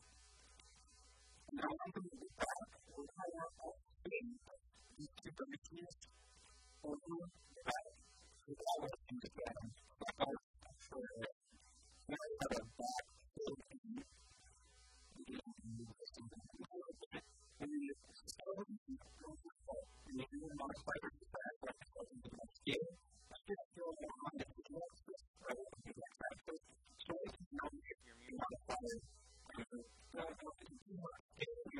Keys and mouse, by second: 3.5 a, 3.9 a, 4.0 b, 5.3 KP_1, 5.7 KP_3, 6.4 g, 7.6 a, 9.7 f, 10.0 a, 10.8 Tab, 13.0 Tab, 14.4 b, 17.6 shift+middle click, 21.0 a, 21.4 right click, 22.2 s, 23.0 right click, 29.4-31.7 middle drag.